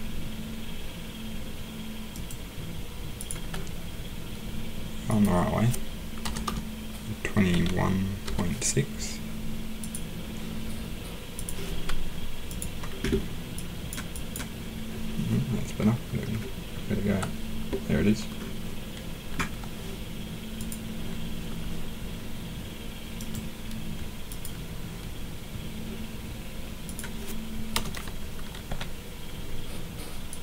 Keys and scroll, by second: 6.2 BackSpace, 6.4 BackSpace, 7.5-8.2 typing, 27.7 BackSpace, 28.7 BackSpace.